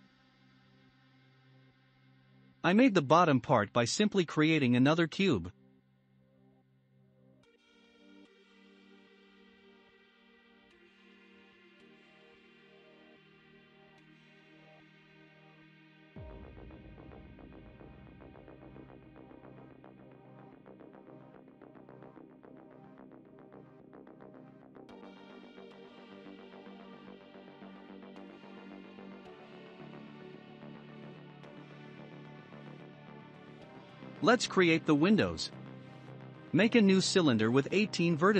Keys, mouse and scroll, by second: 0.2 click, 0.2 scroll down 1, 0.7 shift+middle click, 1.7 shift+a, 3.8-4.4 scroll up 2, 5.1 s, 10.3 s, 15.1-18.2 drag, 19.6-21.4 shift+middle drag, 21.4-22.3 scroll up 5, 22.3 click, 24.8 click, 25.1 scroll, 25.1-25.6 scroll down 4, 25.6-27.2 shift+middle drag, 27.2-27.8 scroll down 3, 27.8-28.6 middle drag, 28.6-29.1 drag, 30.1 ctrl+a, 30.1 click, 30.5-30.9 scroll down 1, 30.9-33.6 middle drag, 33.6 scroll down 1, 33.9 x, 34.1 shift+a.